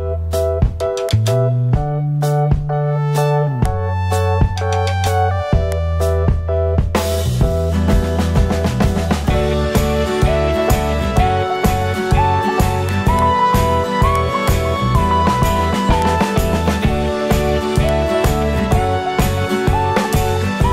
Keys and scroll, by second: 10.7 super+0.